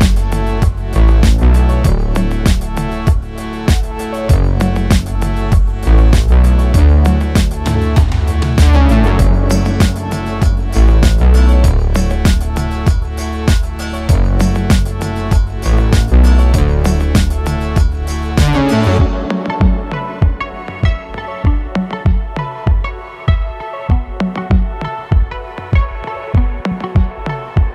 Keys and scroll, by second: 4.1 g, 4.6 z, 6.7 s, 7.1 z, 11.3 g, 11.7 z, 18.6 e, 19.8 s, 27.2 e.